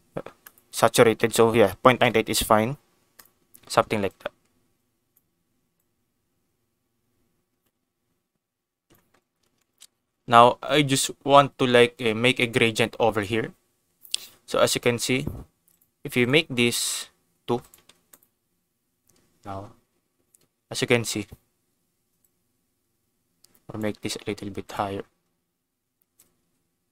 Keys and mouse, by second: 3.2 click, 4.2 click, 5.8-8.9 drag, 9.6 shift+middle click, 10.4 shift+middle click, 15.6 click, 16.1 click, 22.2-23.8 drag, 24.6 click, 26.1-26.9 drag.